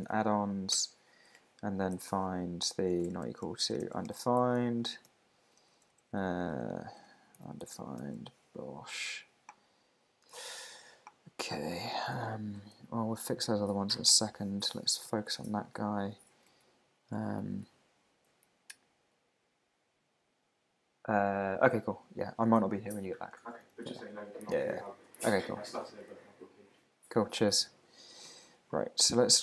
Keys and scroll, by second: 0.7 Return, 1.9 super+f, 4.4 shift+1, 5.1 super+g, 8.0 super+g, 15.0 super+k, 15.2 super+b, 15.9 alt+Left, 16.5 Right, 17.6 shift+super+Left, 18.5 Right, 23.5 shift+super+Right, 23.8 alt+shift+Left, 24.5 super+c, 26.1 Right, 28.6 super+z.